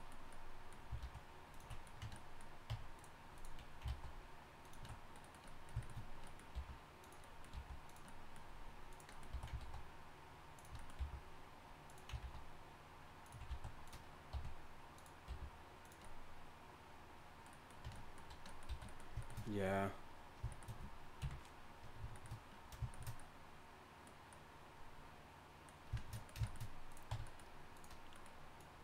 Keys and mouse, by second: 1.0 alt+s, 2.0 Tab, 2.7 Tab, 3.9 alt+s, 6.5 g, 7.5 g, 8.9-12.2 drag, 9.3 s, 11.0 g, 12.2 alt+s, 13.5 s, 14.3 r, 15.3 g, 17.9 Tab, 18.7 a, 21.2 KP_1, 27.1 Tab.